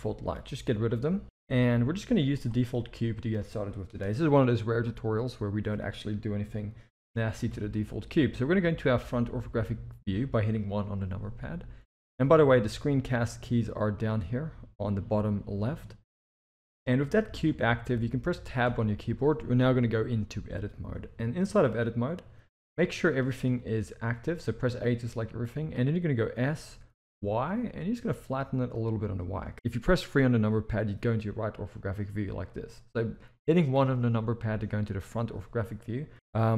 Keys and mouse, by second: 0.0 drag, 1.2 Delete, 1.3 click, 1.5 Delete, 2.4 click, 2.7-3.2 middle drag, 7.5 KP_1, 17.3 click, 18.7 Tab, 22.8 middle click, 23.6 alt+a, 24.7 middle click, 26.3 s, 29.5 KP_3, 33.7 KP_1.